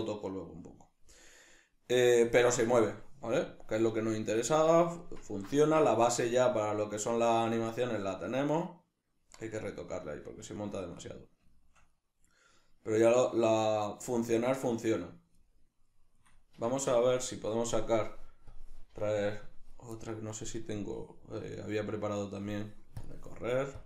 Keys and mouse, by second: 3.5 click, 4.5 click, 5.0-18.6 ctrl+middle drag, 16.6 Escape, 18.6-23.8 drag.